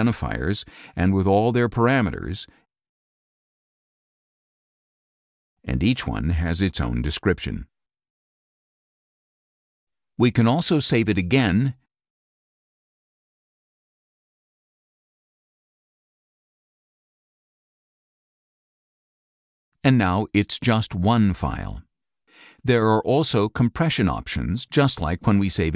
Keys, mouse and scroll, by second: 1.3 click, 2.4 click, 3.2 click, 4.2 click, 5.0 click, 6.5 click, 8.8 click, 10.0 click, 11.2 click, 14.7 click, 20.1 click, 24.2 click, 25.2 click.